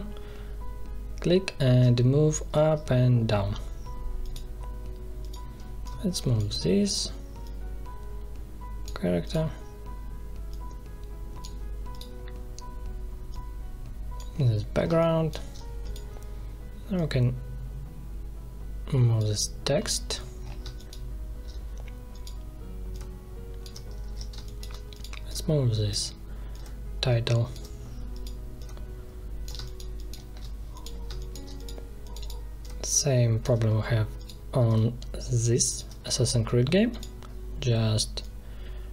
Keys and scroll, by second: 2.5 ctrl+z, 14.8 space, 20.6 space, 24.0 ctrl+z, 24.3 space, 29.5 space.